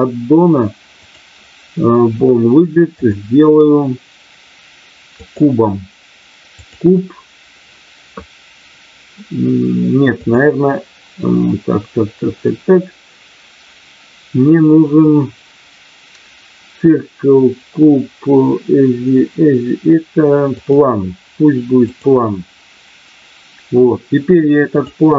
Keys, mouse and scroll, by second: 0.9 click, 3.0-5.4 drag, 6.5 click, 10.2-20.9 drag, 22.2 click, 24.7-25.1 drag.